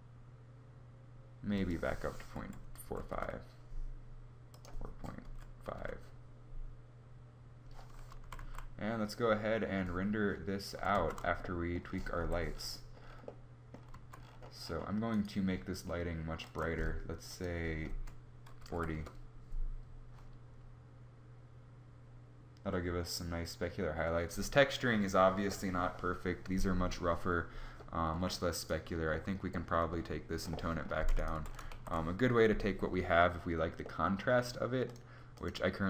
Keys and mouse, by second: 7.7 z, 7.9 z, 10.9 shift+z, 11.7 Escape, 13.6 z, 18.6 Escape, 18.6 z, 30.9 g, 31.2 shift+a.